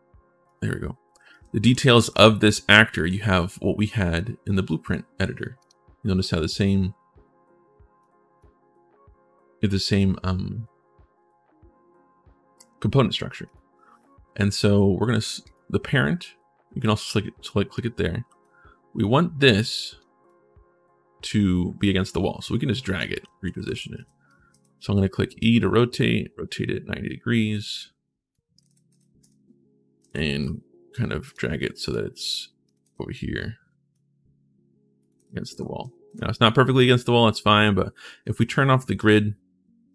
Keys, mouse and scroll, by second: 0.9-2.3 typing, 2.7 click, 5.3 click, 7.8 click, 15.2 click, 17.5 right click, 18.0 d, 19.2 click, 20.0-22.7 drag, 22.7-24.2 typing, 22.9-24.1 right drag, 25.2 click, 26.1-28.1 right drag, 28.1-30.6 typing, 28.3 right click, 29.8 right click, 29.8 click, 30.7 click, 31.7 click, 32.5 right click, 32.6 s, 33.7-34.8 right drag, 34.7-36.4 typing, 34.9-36.6 right drag, 38.7 click, 39.8-39.9 right drag.